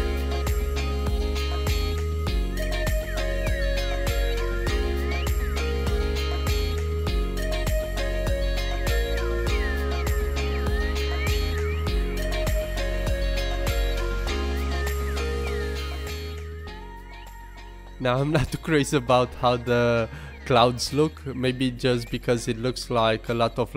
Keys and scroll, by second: 0.6 super+g, 3.5 super+z, 4.2 super+z, 5.1 super+BackSpace, 5.8 alt+Left, 6.5 alt+super+g, 10.8 super+z, 11.6 super+t, 11.9 super+g, 12.1 super+t, 13.9 super+g.